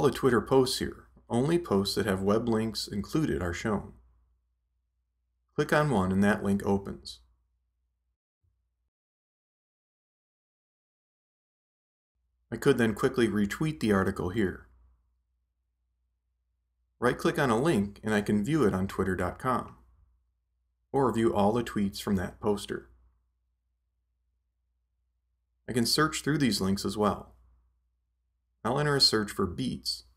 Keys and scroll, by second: 28.5-29.9 typing.